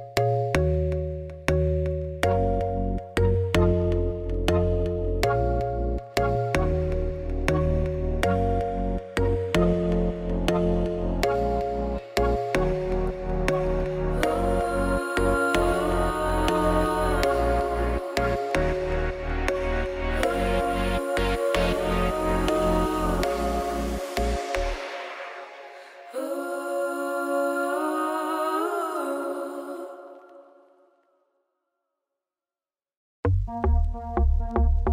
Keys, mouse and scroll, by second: 0.0 KP_Divide, 0.3 middle click, 0.7-2.6 drag, 2.6 u, 2.8 middle click, 3.3 2, 3.8 alt+click, 5.8 u, 6.2-6.6 scroll down 2, 6.6 Tab, 6.9 Tab, 7.2 alt+h, 7.4 3, 7.5 click, 7.8 click, 11.4 click, 14.5 click, 15.0 s, 18.4 click, 18.7 s, 20.2 KP_Divide, 20.7-23.8 shift+middle drag, 23.8-24.2 scroll down 1, 24.2 middle click, 24.3-24.7 scroll down 1, 24.7-25.1 scroll up 1, 25.1-26.2 shift+middle drag, 26.2 click, 27.0 Tab, 27.7 r, 28.8 Tab, 29.5 middle click, 29.9 click, 30.1 Tab, 30.7-32.3 middle drag, 32.3 u, 33.2 click, 33.7 Tab, 34.1 Tab, 34.4 a, 34.8 r.